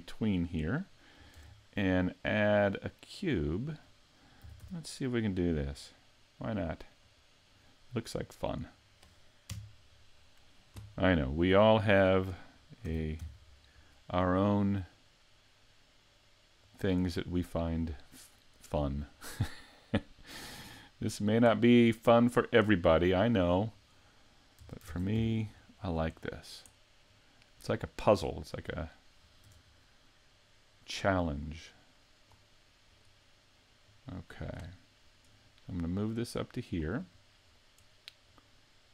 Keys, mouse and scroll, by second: 0.2-1.4 scroll down 3, 1.4 shift+a, 4.5 s, 8.1 middle click, 9.5 KP_Decimal, 10.2-11.1 scroll down 2, 11.1 scroll down 4, 11.6 middle click, 12.9 s, 16.8 click, 17.2 middle click, 19.0-19.5 scroll down 3, 19.5 middle click, 21.6-22.3 scroll down 1, 22.3 scroll down 1, 22.5 middle click, 23.2-23.8 scroll up 1, 23.8 right click, 24.7 Tab, 25.9 right click, 26.2 middle click, 27.1 click, 28.3 middle click, 29.5 Tab, 29.7-30.3 scroll down 3, 30.1 middle click, 31.5 click, 32.9 right click, 33.9 click, 35.1 right click, 36.0 click, 37.0-38.3 scroll up 4, 38.5 click.